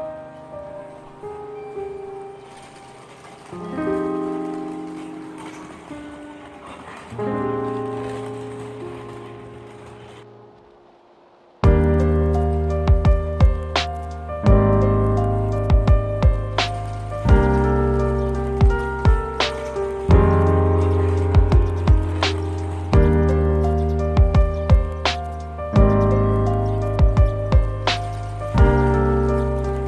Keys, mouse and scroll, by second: 28.0 scroll down 1.